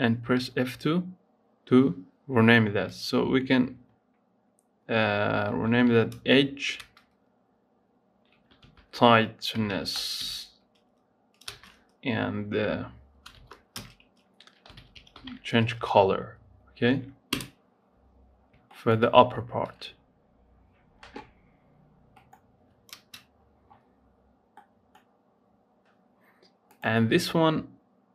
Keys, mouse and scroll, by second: 0.1 F2, 18.2 scroll down 5, 18.5 shift+middle click, 19.0-22.0 scroll up 2, 26.5-28.1 drag.